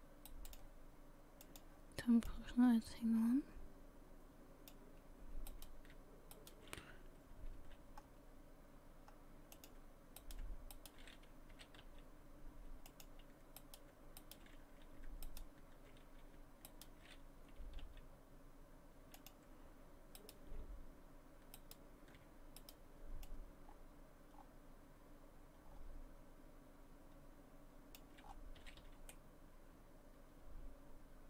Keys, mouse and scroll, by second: 1.4 click, 2.3 click, 5.5 right click, 6.3 shift+right click, 7.2 s, 10.2 right click, 10.7 shift+right click, 11.5 s, 13.6 right click, 14.2 shift+right click, 15.2 right click, 16.7 shift+right click, 17.5 s, 20.2 right click, 21.6 shift+right click, 22.6 right click, 24.6 click, 28.2-28.6 scroll down 5, 28.6 a, 28.8 a, 29.1 middle click.